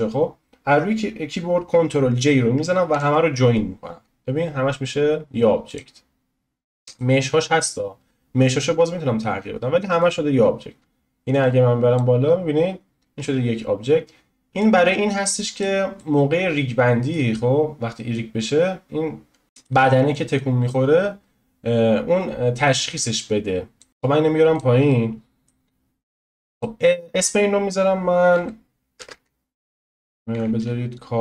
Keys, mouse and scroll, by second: 2.9 ctrl+j, 5.7-9.9 drag, 10.0-11.4 drag, 13.2 ctrl+z, 14.6 click, 16.0-18.1 middle drag, 18.1-19.4 drag, 19.4 ctrl+z, 19.4-20.3 middle drag, 20.3 click, 23.9 ctrl+z, 24.5 click, 24.9-26.4 middle drag, 26.4 click, 26.5-29.7 drag, 31.1 click.